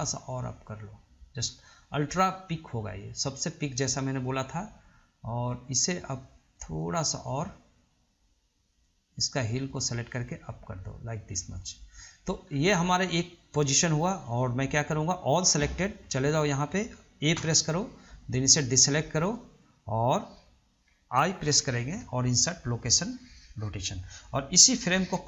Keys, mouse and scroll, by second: 0.0 click, 6.8 click, 8.9 click, 10.0 click, 12.6-13.0 scroll down 2, 15.8-16.5 middle drag, 16.5 scroll up 1, 16.8 middle click, 17.6 a, 18.7 ctrl+drag, 19.6-21.6 middle drag, 21.6 i, 24.4 click, 24.9-25.2 right drag.